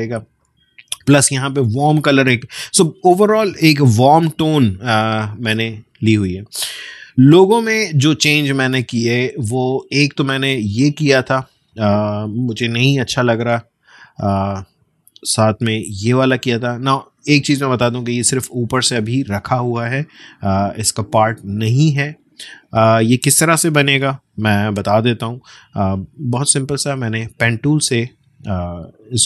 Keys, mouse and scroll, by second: 6.3-7.3 scroll down 1, 7.4-8.0 alt+scroll down 1, 8.0-8.4 scroll down 1, 8.4 space, 8.8 click, 9.0 space, 10.2-10.8 alt+scroll up 1, 13.0 space, 13.4 click, 13.5 space, 14.8 click, 14.9 space, 16.5-20.5 drag, 20.5-24.0 drag, 24.0 BackSpace, 26.0 click, 28.6-29.0 alt+scroll up 1.